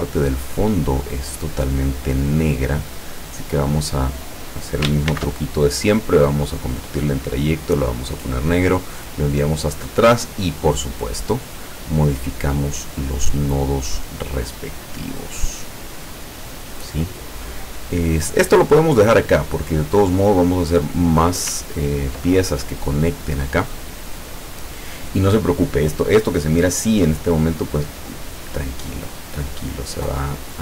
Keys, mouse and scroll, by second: 1.0 click, 1.9-4.1 drag, 5.2 ctrl+shift+c, 6.6 click, 7.7 click, 8.9 click, 10.2 click, 11.3-13.3 drag, 14.6 click, 15.2-17.1 drag, 21.7 ctrl+scroll down 2, 27.2 click, 29.7-30.6 drag.